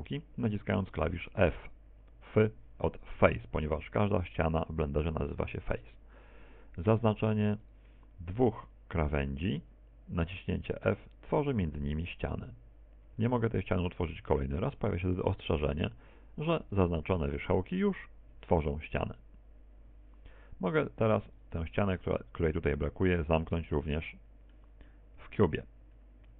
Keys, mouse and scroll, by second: 3.1 f, 9.1 right click, 9.6 shift+right click, 10.5 shift+right click, 11.1 shift+right click, 13.0 f, 15.2 f, 22.9 right click, 24.1 shift+right click, 24.8 shift+right click, 25.5 shift+right click, 25.9 middle click.